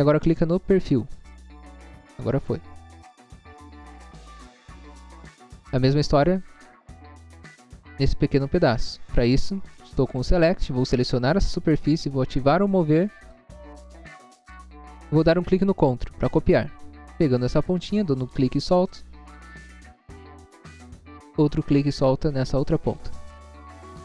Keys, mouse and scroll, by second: 0.9 click, 1.8 scroll down 1, 2.5 scroll down 1, 5.2 scroll up 1, 5.8 scroll up 1, 7.9 scroll up 1, 8.5 scroll up 1, 8.7 space, 9.2 scroll up 1, 10.9 scroll up 1, 11.4 click, 13.3 click, 14.4 click, 18.8 click, 19.3 scroll down 1, 19.8 scroll down 1, 21.4 scroll up 1, 23.0 click, 23.5 scroll down 1.